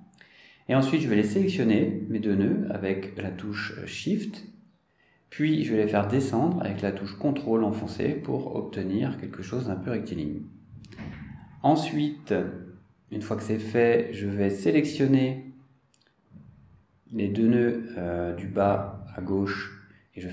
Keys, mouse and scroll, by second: 1.6 click, 4.6 click, 6.6 shift+click, 9.4-14.4 ctrl+drag, 15.6-16.2 scroll down 4, 16.2 scroll up 2, 17.0 click, 19.1 shift+click.